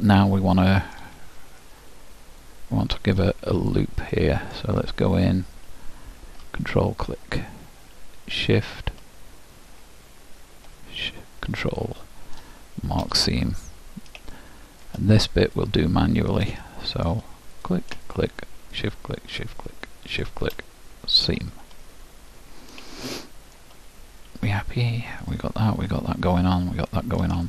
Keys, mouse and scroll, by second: 0.0-3.7 middle drag, 3.7-5.8 drag, 4.2-6.8 middle drag, 6.8-10.4 drag, 7.6-11.7 middle drag, 11.1-12.9 drag, 11.9-14.8 middle drag, 15.6-17.3 drag, 17.3 middle click, 17.7-22.0 drag, 22.0-27.4 middle drag.